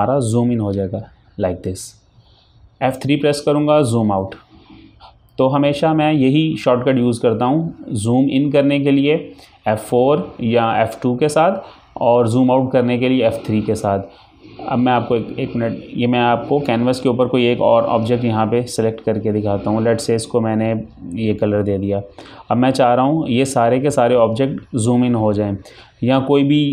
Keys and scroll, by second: 0.9 F4, 4.4 F4, 4.5 F3.